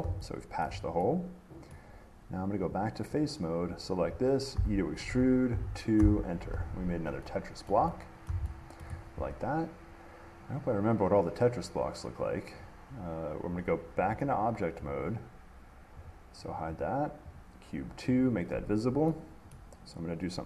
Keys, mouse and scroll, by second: 0.9 shift+middle click, 1.9 middle click, 2.9 click, 3.4 click, 4.0-4.8 scroll, 4.8 e, 5.7 2, 6.2 Return, 7.9 shift+middle click, 8.5 middle click, 9.0 shift+middle click, 14.3 click, 15.1 click, 16.3 click, 17.0 click, 17.6 click, 18.4 click, 18.8 middle click, 19.7 middle click.